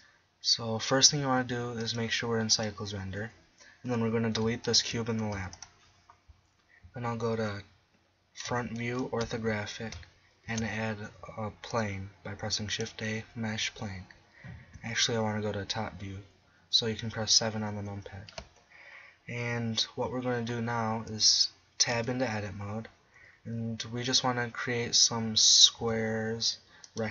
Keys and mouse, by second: 1.8-2.9 drag, 4.7-6.6 right drag, 5.4 x, 8.5 KP_1, 9.2 KP_5, 10.5 shift+a, 14.8 KP_7, 21.9 Tab, 25.8 s, 27.0-27.1 drag.